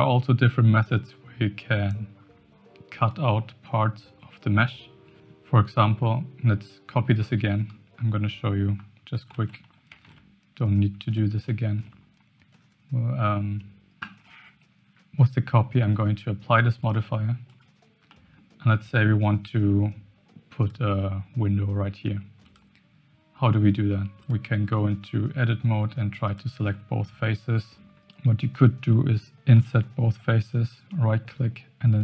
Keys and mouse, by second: 3.0 click, 7.2-7.7 middle drag, 9.3 shift+d, 11.7 shift+middle click, 16.9-17.6 drag, 18.2 middle click, 20.6 click, 23.6 Tab, 24.7 middle click, 27.8 ctrl+z, 29.5 i, 30.7-32.0 drag.